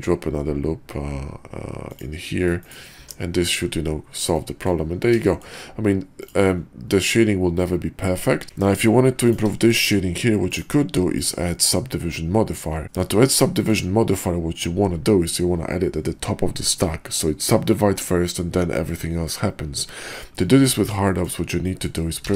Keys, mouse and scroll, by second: 2.9 Tab, 4.3-4.7 drag, 5.2 shift+drag, 6.1 click, 9.7 shift+middle drag, 11.1 click, 12.8 middle drag, 13.5 shift+middle click, 20.4 middle drag, 21.0 shift+middle drag, 21.6 middle drag, 22.1 q.